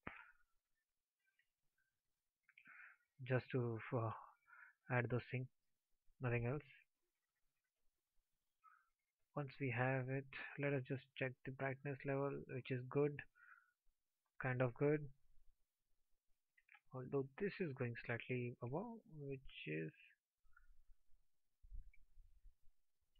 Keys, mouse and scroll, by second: 3.2 alt+drag.